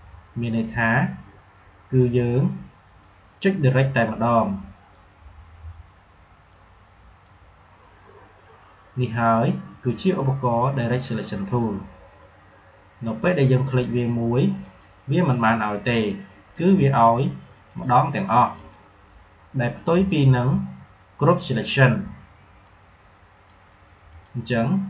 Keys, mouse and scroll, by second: 2.9-9.6 drag, 13.1 click, 22.5-24.0 drag.